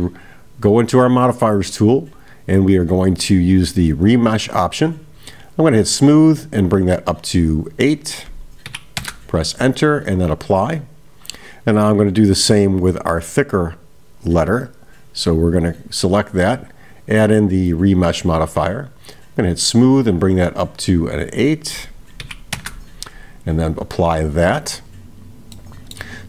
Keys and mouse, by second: 2.0-5.8 drag, 6.7 click, 7.7-9.8 drag, 10.4 click, 11.8 click, 14.6-15.4 right drag, 15.5 click, 16.9-18.6 drag, 19.6 click, 20.3 click, 21.2-23.3 drag, 24.5 click, 25.6 middle click.